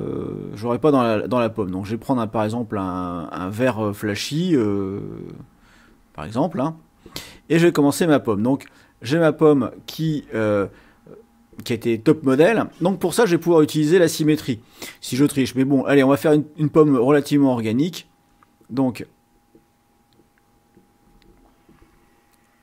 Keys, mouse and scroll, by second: 1.5-4.2 drag, 18.2 click, 19.3-22.6 drag.